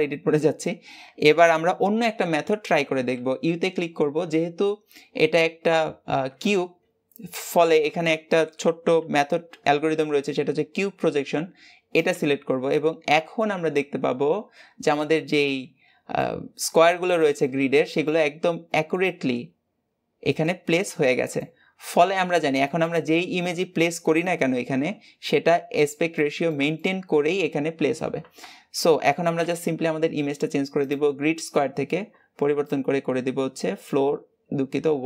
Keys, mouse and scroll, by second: 0.3 a, 12.5-15.5 middle drag, 16.3-16.9 scroll up 2, 16.9 shift+middle click, 17.5-17.9 scroll up 1, 17.9-20.9 middle drag, 21.5-22.2 scroll down 3, 23.3 a, 24.7-25.1 scroll up 2, 25.7-27.4 shift+middle drag, 27.4-28.2 scroll up 1.